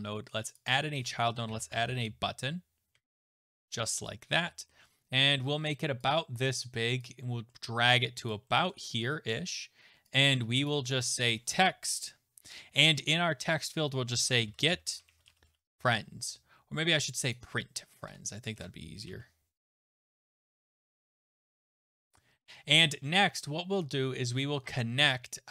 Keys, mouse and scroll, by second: 0.5 click, 1.3-3.4 typing, 4.4-6.0 scroll down 7, 6.0 click, 7.0 click, 7.5-8.3 scroll down 1, 8.3 click, 8.7-10.1 scroll down 1, 10.1 click, 10.7 click, 11.0 click, 12.0-12.5 scroll, 13.9-16.0 typing, 17.3 click, 19.8 click, 20.4-21.8 typing, 22.4 click.